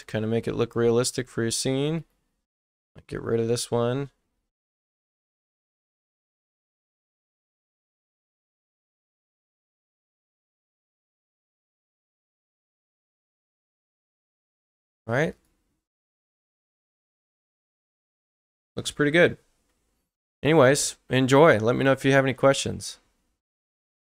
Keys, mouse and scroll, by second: 1.9 click, 8.5 click, 10.4 right click, 15.3 right click.